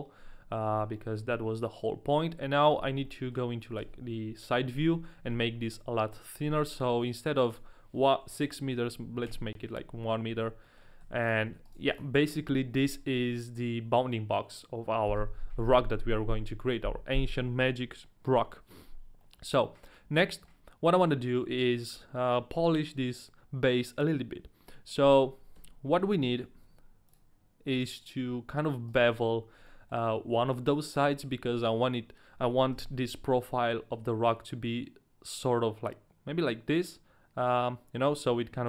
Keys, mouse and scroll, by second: 0.6 scroll up 1, 1.2 shift+middle click, 1.2-3.1 scroll up 1, 3.1 middle click, 3.8 KP_3, 7.5 click, 10.3-12.0 typing, 10.6 middle click, 11.6 right click, 12.0 middle click, 12.0 right click, 12.2 middle click, 19.2 middle click, 20.0 middle click, 20.5 shift+middle click, 25.6 Tab, 26.0 a, 26.7 Tab, 26.7 a, 28.9 right click, 29.6 middle click, 32.7 KP_1.